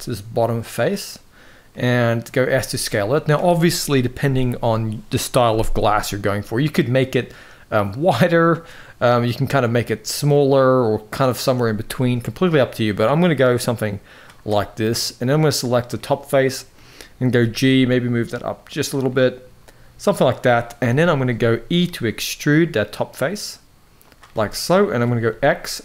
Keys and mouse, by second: 0.6 click, 1.4 middle click, 2.2 s, 14.2 middle click, 15.7 middle click, 17.0 g, 18.8-20.0 middle drag, 20.4 KP_1, 21.2 shift+middle click, 21.8 e, 24.0-24.6 middle drag, 24.9 x.